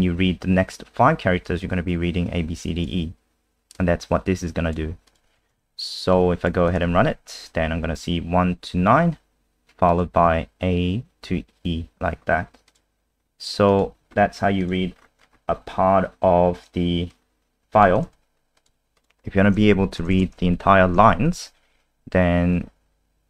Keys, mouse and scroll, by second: 5.5 ctrl+s, 6.1 click, 6.9 F5, 14.0 alt+F4, 14.6 click, 14.9-16.6 scroll down 5, 17.1 click, 18.0 ctrl+c, 18.6 click, 19.8 Home, 20.1 ctrl+shift+End, 20.9 ctrl+v.